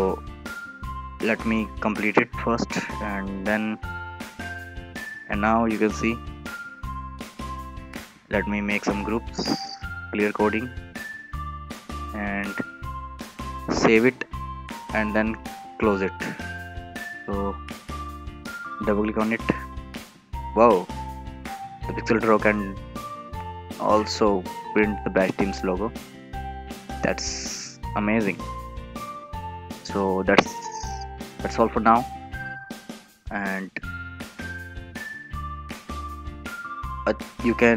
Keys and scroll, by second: 13.7 ctrl+s.